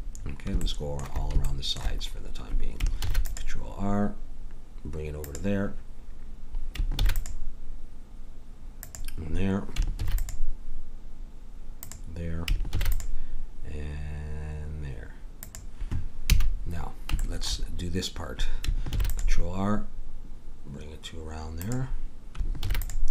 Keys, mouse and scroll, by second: 3.1 ctrl+r, 7.0 ctrl+r, 10.0 ctrl+r, 12.7 ctrl+r, 16.3 a, 18.9 ctrl+r, 22.6 ctrl+r.